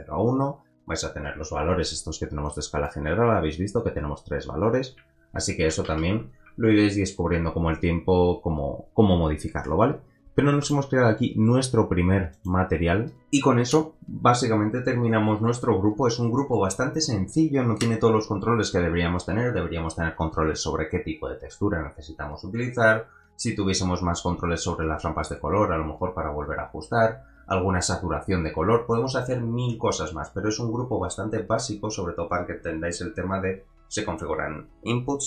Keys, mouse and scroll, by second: 2.4 click, 3.0 click, 6.1 ctrl+z, 9.9 scroll down 2, 10.5 click, 10.6 middle click, 10.9 g.